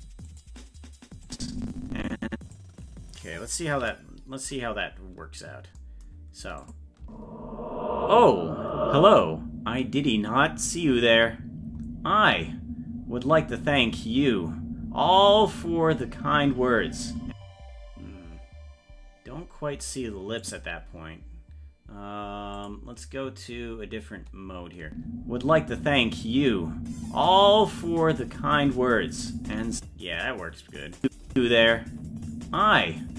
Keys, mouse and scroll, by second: 0.3 click, 1.3-2.6 drag, 4.1 ctrl+s, 4.4-4.9 scroll down 1, 5.8 scroll down 14, 6.6 click, 7.0 space, 10.7 click, 11.5-12.0 scroll down 2, 12.0-13.4 scroll up 1, 17.3 space, 20.4 click, 23.2 click, 24.9 space, 31.0 click, 31.0 space, 31.3 space.